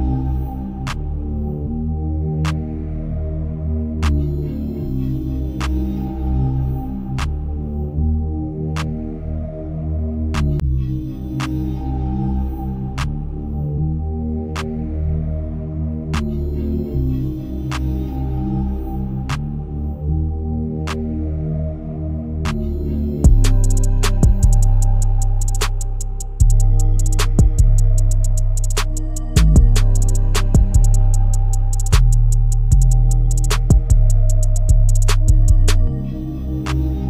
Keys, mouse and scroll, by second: 0.3-0.7 scroll up 4, 0.8-1.7 shift+middle drag, 1.7 s, 4.3-4.7 scroll down 2, 4.8 g, 8.5-10.3 shift+middle drag, 10.3 Tab, 11.3 KP_1, 12.1 e, 17.0 shift+middle click, 17.5 scroll up 1, 18.0 middle click, 18.5-21.7 middle drag, 22.4 middle click, 23.2 s, 24.1-25.6 middle drag, 28.2-31.3 scroll down 9, 31.3 n, 32.6 ctrl+z, 33.4 ctrl+z, 35.0 click, 36.7 scroll up 5.